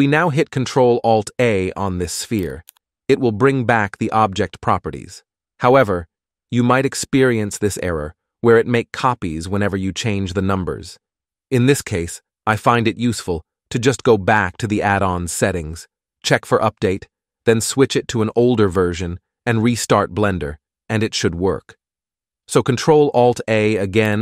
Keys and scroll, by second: 2.9 ctrl+alt+a, 23.4 s.